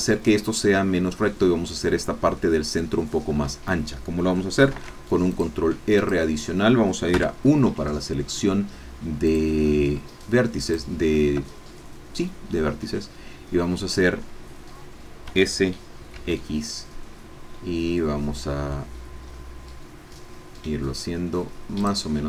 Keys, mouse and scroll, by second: 3.3-3.6 scroll up 1, 4.7 ctrl+r, 5.3 ctrl+click, 6.1 click, 7.3 1, 9.2 click, 10.6 shift+click, 15.3 s, 16.1 x, 18.4 middle click, 19.2 middle click, 21.8 click.